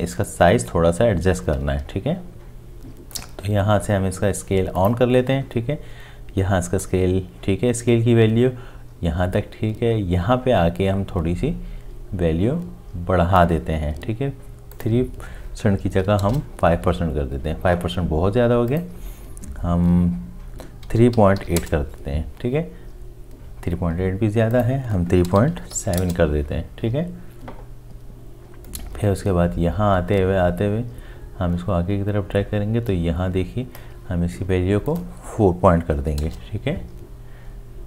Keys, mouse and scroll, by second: 16.0 KP_5, 16.2 KP_Enter, 20.8 3, 21.1 ., 21.4 8, 21.6 Return, 25.4 3, 25.6 ., 25.8 7, 26.0 Return, 36.1 4.